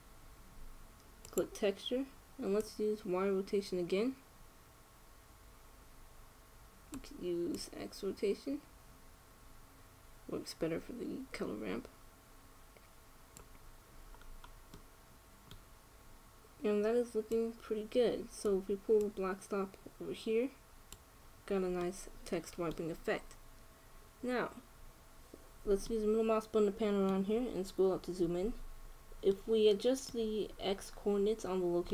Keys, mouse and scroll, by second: 2.3-5.1 drag, 8.2-10.1 drag, 14.8-18.0 middle drag, 18.0-19.5 drag, 19.7-21.5 drag, 21.7 click, 22.5-24.4 middle drag, 26.6-31.5 middle drag.